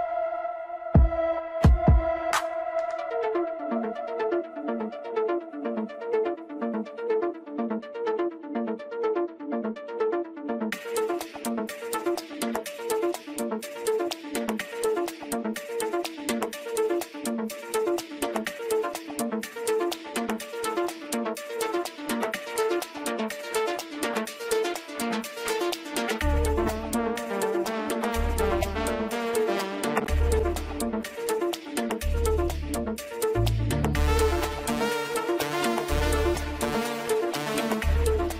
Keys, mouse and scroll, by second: 3.8-4.8 scroll down 1, 4.8 Tab, 5.7-6.9 middle drag, 6.9-7.4 scroll up 1, 7.4 click, 11.4 KP_7, 13.4 shift+d, 20.1 scroll down 1, 20.4-23.5 middle drag, 27.4-28.8 middle drag, 28.8 Tab, 29.3-29.8 scroll down 2, 29.8-30.9 middle drag, 30.9-31.7 scroll up 1, 31.7-34.0 middle drag, 34.0-34.8 scroll down 1, 34.8 click, 35.8-38.3 middle drag.